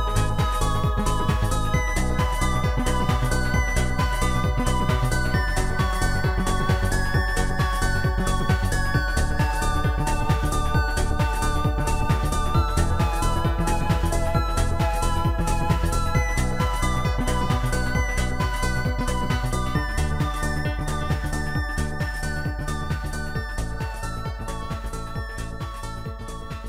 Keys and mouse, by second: 0.6 shift+click, 2.4 shift+click, 3.5 shift+click, 3.9 shift+click, 9.2 click, 10.2 click, 13.0 shift+click, 14.2 shift+click, 15.0 shift+click, 16.0 Return, 17.4 shift+click, 19.5 Return, 19.5 click, 19.8 click, 20.8 click, 21.8 shift+click, 23.4 shift+click, 25.0 shift+click, 26.2 shift+click.